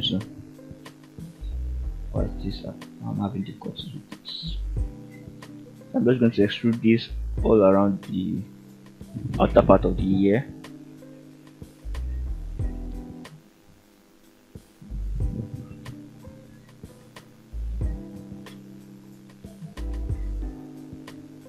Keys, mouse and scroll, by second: 0.1 shift+middle click, 1.3 click, 1.8 g, 4.2 click, 5.0 shift+click, 5.5 shift+middle click, 6.4 e, 7.6 click, 8.2 r, 9.1 click, 9.4 scroll down 1, 9.8 shift+middle click, 10.2-10.8 shift+scroll up 3, 11.1 e, 12.3 click, 12.8 r, 13.9 click, 14.3 shift+middle click, 15.1 e, 17.2 click, 17.7 shift+middle click, 18.9 e, 20.6 click, 21.3 r.